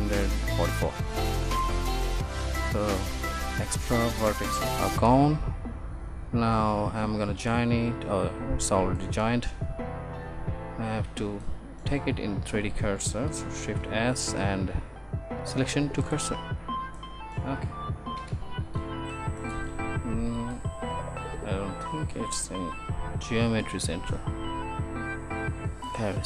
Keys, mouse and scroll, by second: 3.1 Tab, 13.8 shift+s.